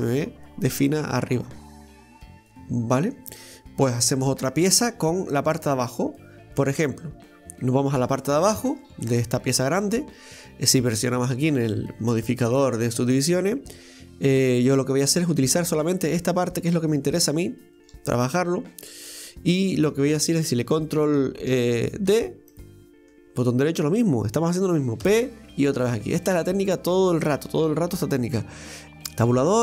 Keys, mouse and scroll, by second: 1.4-5.2 middle drag, 5.3-6.8 middle drag, 6.8 scroll up 1, 8.0 Tab, 8.2 right click, 8.8 Tab, 12.8 click, 14.3 right click, 15.4 click, 16.1 right click, 16.5 shift+right click, 16.9 shift+right click, 17.7 shift+right click, 18.1-21.1 middle drag, 26.2-28.6 middle drag, 28.6 Tab, 28.9 right click, 29.3 Tab.